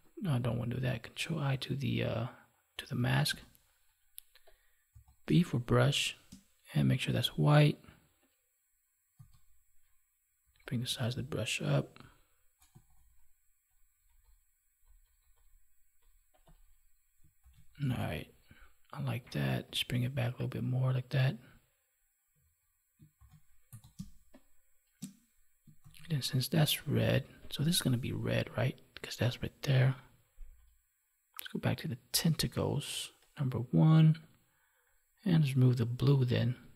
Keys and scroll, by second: 0.2 ctrl+z, 3.3 ctrl+i, 5.2 space, 17.4 ctrl+s, 23.1 ctrl+s, 23.9 space.